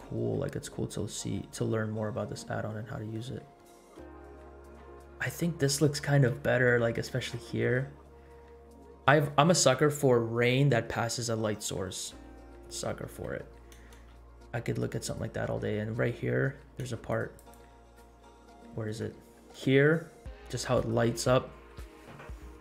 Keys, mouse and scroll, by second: 0.0 space, 1.5-2.2 scroll down 3, 2.4 middle click, 3.4 scroll up 1, 4.4 scroll up 1, 5.1-6.0 scroll up 3, 6.5 shift+middle click, 7.5 shift+middle click, 12.1 space, 12.4 scroll down 1, 12.9-13.2 shift+middle drag, 13.4 scroll up 2, 14.0 space, 15.0-15.4 scroll down 2, 16.8 space, 17.1 click, 17.7 click, 18.6 scroll down 1, 18.6-19.0 shift+middle drag, 19.2-19.5 scroll up 2, 19.7 shift+middle click, 20.2 scroll up 1.